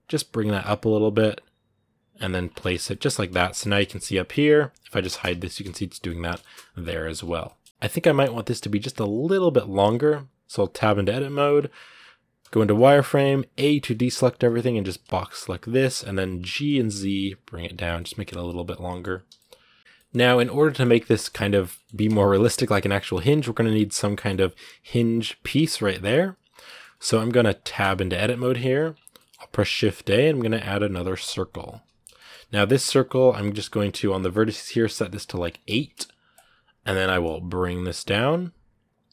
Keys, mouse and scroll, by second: 2.2 scroll down 1, 2.4-4.7 middle drag, 4.7 right click, 4.8 shift+middle click, 5.1 h, 5.2-6.9 middle drag, 6.9 alt+h, 7.2 middle click, 7.5 a, 7.7-8.6 scroll up 3, 8.6 middle click, 9.4 scroll up 1, 10.6 Tab, 12.8 scroll down 2, 13.3 a, 14.0-15.2 scroll up 1, 15.4 b, 17.8 middle click, 18.0 scroll down 7, 18.2 middle click, 19.1 a, 19.1 middle click, 20.0 scroll up 2, 20.4 shift+middle click, 20.6 scroll up 1, 20.9-22.5 shift+middle drag, 22.5 scroll up 2, 22.6-26.2 middle drag, 26.2 scroll down 2, 26.4 shift+middle click, 27.3 right click, 27.6 Tab, 28.0 scroll down 2, 28.2 middle click, 28.6 a, 28.9-31.1 shift+middle drag, 31.1 shift+a, 31.4 scroll down 2, 31.9-35.4 shift+middle drag, 35.4-36.6 drag, 36.6 scroll up 1, 36.8 g, 38.9 middle click, 39.0 scroll up 2.